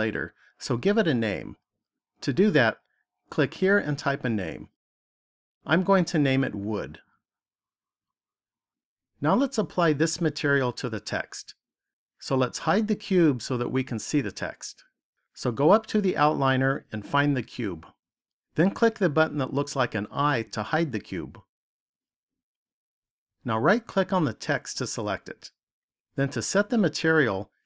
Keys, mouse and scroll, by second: 5.2 click, 7.6 o, 15.6 click, 19.5 click, 24.4 right click.